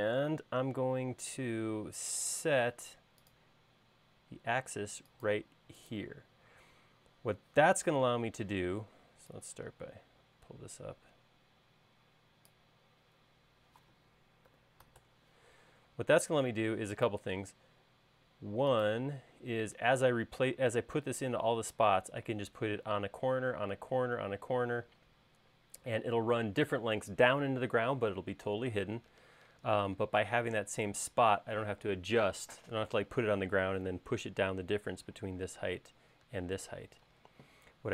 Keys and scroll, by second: 8.9 p, 14.9-15.4 typing, 16.5 space.